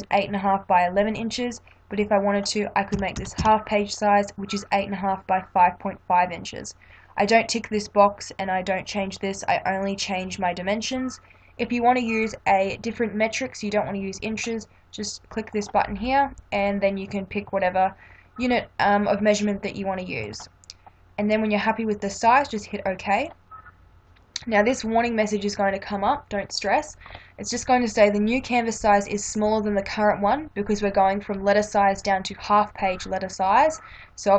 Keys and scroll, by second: 2.7-3.9 typing.